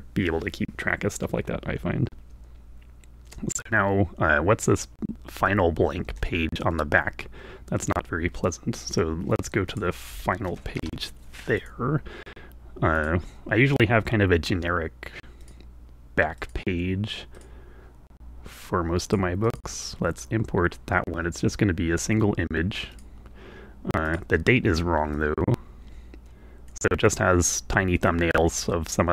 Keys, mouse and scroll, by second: 6.1 alt+Tab, 9.6 click, 10.2 1, 10.5 7, 10.8 Return, 11.6 click, 12.9 click, 15.3 click, 16.3-17.5 drag, 19.0 click, 19.5-23.2 drag, 24.1 click, 25.1-26.9 drag, 28.0 click.